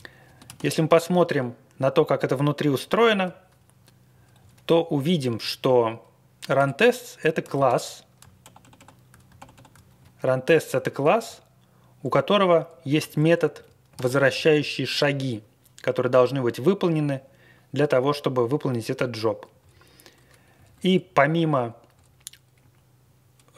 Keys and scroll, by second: 0.4 Left, 0.4 ctrl+x, 1.0 ctrl+x, 1.3 Left, 1.4 Left, 1.4 Left, 1.4 Left, 1.5-1.9 Left, 2.9 alt+., 4.3 Down, 4.6 Right, 4.9 Down, 5.3 Right, 5.5 Right, 6.5 Return, 7.4 ctrl+x, 7.6 1, 8.4 super+=, 8.6 super+=, 9.9 Down, 10.2-10.7 Down, 11.2 Down, 11.4 Down, 11.5 Down, 11.5 Down, 11.6 Down, 11.7 Down, 11.7 Down, 11.7 Down, 11.8 Down, 11.8 Down, 11.9 Down, 11.9 Down, 12.2 Up, 12.3 Up, 12.9 Up, 13.9 alt+f, 14.1 alt+f, 14.3 alt+f, 19.0 Down, 19.3 Down, 19.3 Down, 19.3 Down, 19.4 Down, 19.5 Down, 20.5 Up, 20.7 Up, 20.8 Up, 21.3 Up, 21.5 Up, 21.9 Down, 22.5 Right.